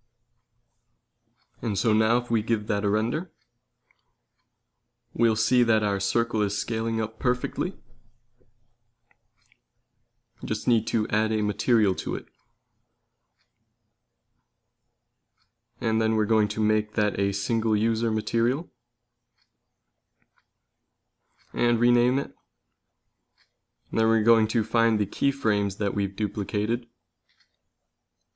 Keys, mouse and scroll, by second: 1.5 z, 2.9 shift+Left, 3.6 Right, 3.7 Right, 3.9 Right, 4.1 Right, 4.3 Right, 4.5 Right, 4.7 Right, 4.8 Right, 5.0 Right, 5.2 Right, 5.6 Right, 5.8 Right, 6.0 Right, 6.3 Right, 6.5 Right, 6.6 Right, 6.9 Right, 7.1 Right, 7.3 Right, 7.5 Right, 8.4 z, 8.7 z.